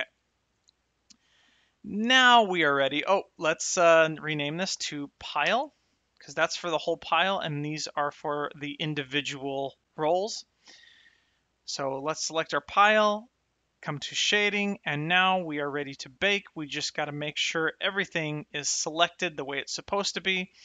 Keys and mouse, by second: 3.3 click, 7.6 click, 11.7 click, 13.7 click, 17.4 click.